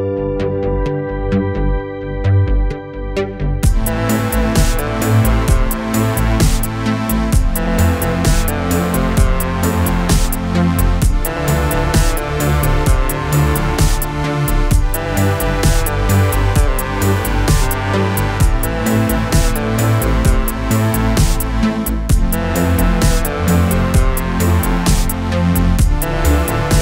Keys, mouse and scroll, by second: 0.2 click, 1.6 ctrl+d, 2.4 click, 4.1-6.1 typing, 8.0 click, 9.3 click, 19.6 click, 20.9-23.8 click, 25.3 click.